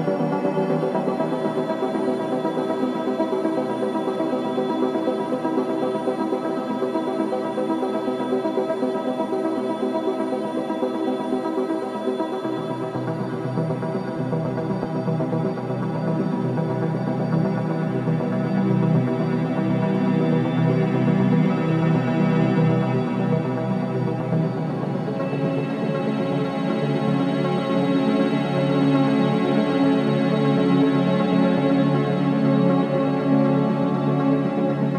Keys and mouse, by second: 2.5-4.5 drag, 4.9-6.5 middle drag, 6.7 ctrl+z, 6.9 ctrl+z, 8.0-8.5 middle drag, 9.4-9.9 drag, 13.7-15.9 drag, 17.1-22.5 drag, 23.5 click, 26.3-32.1 drag, 32.6-34.9 middle drag.